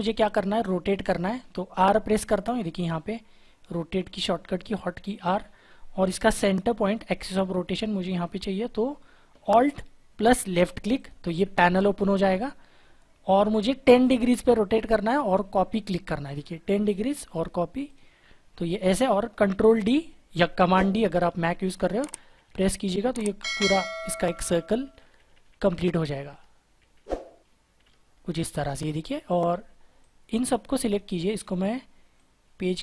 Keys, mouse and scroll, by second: 5.2 typing, 10.9 alt+click, 21.4 ctrl+d, 21.8 ctrl+d, 21.9 ctrl+d, 22.1 ctrl+d, 22.3 ctrl+d, 22.4 ctrl+d, 22.9 ctrl+d, 23.7 ctrl+d, 24.0 ctrl+d, 24.3 ctrl+d, 24.4 ctrl+d, 24.6 ctrl+d, 24.8 ctrl+d, 24.9 ctrl+d, 25.1 ctrl+d, 25.3 ctrl+d, 25.4 ctrl+d, 25.6 ctrl+d, 25.8 ctrl+d, 26.0 ctrl+d, 26.2 ctrl+d, 26.7 ctrl+d, 27.7 ctrl+d, 32.1 shift+click.